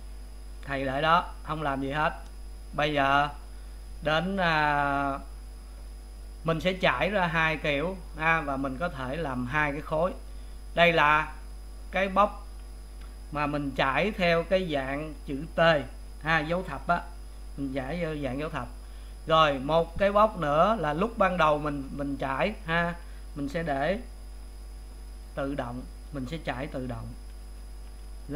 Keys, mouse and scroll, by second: 12.4 click, 18.1 a, 19.9 click, 21.0 click, 23.9 a.